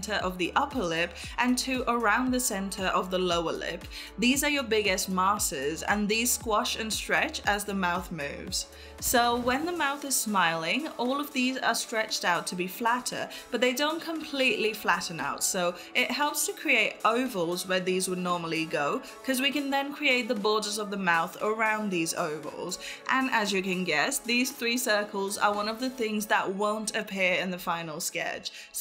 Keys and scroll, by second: 0.0 ctrl+s.